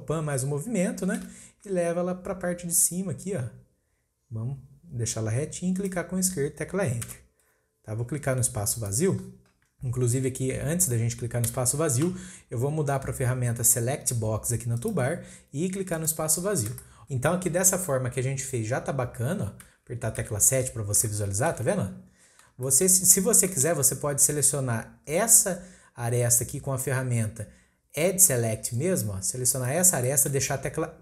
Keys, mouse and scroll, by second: 8.7-11.8 drag, 14.8-16.0 drag, 16.5-16.8 scroll down 2, 16.8-18.2 shift+middle drag, 18.2-18.8 scroll up 1, 18.8-19.3 scroll up 1, 19.3-20.1 scroll down 2, 20.1 KP_7, 20.6-21.0 scroll up 3, 21.0-22.1 shift+middle drag, 22.1-22.6 scroll up 1, 22.6-26.5 shift+middle drag, 29.6 click, 30.1-31.0 shift+middle drag.